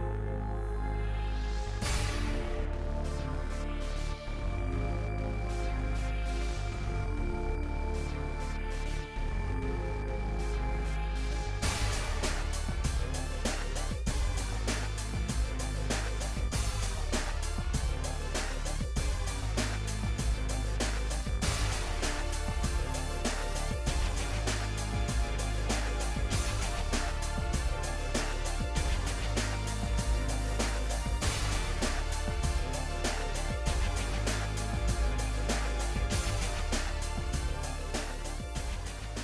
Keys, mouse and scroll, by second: 0.1 click, 0.4 shift+middle click, 0.6 g, 1.2-1.6 scroll up 13, 1.4 shift+middle click, 1.6 shift+middle click, 2.0 g, 2.5 scroll down 16, 2.8 shift+middle click, 3.0 click, 3.2 g, 3.5-4.0 scroll up 12, 3.6 shift+middle click, 4.0 g, 4.8 scroll up 8, 4.9 shift+middle click, 5.6 scroll up 1, 5.8 g, 6.3-6.8 scroll down 40, 6.8 shift+middle click, 6.9 scroll up 7, 7.0 click, 7.4 s, 8.2 click, 8.7 g, 9.2 scroll up 5, 9.3 shift+middle click, 9.8 scroll up 1, 10.8 n, 11.2-13.1 drag, 13.1 n, 13.4 g, 14.2 shift+middle click, 14.3 shift+scroll up 1, 14.4 shift+middle click, 14.6 click, 14.8 g, 15.4 scroll up 5, 15.6 shift+middle click, 15.9 g, 17.0-17.4 scroll down 22, 17.4 shift+middle click, 18.1 click, 18.2 shift+middle click, 18.4 shift+click, 18.8 g, 19.6 shift+middle click, 19.8 click, 20.0 g, 20.8-21.3 scroll down 11, 21.3 click, 21.5-22.1 scroll down 3, 21.5 middle click, 22.1 middle click, 23.0-24.6 middle drag, 24.6 ctrl+s, 25.0 shift+middle click, 25.3 scroll down 1, 25.4-29.9 shift+middle drag, 30.1 ctrl+s, 30.3 shift+middle click, 30.8 shift+a, 31.3-34.0 drag, 34.0 g, 35.4-36.1 scroll up 4, 35.5 shift+middle click, 36.1 g, 36.7 KP_1, 36.9-37.2 scroll down 3, 37.2 g, 38.0 click, 38.2 scroll up 2, 38.3 ctrl+middle click, 39.0 scroll up 5, 39.1 shift+middle click.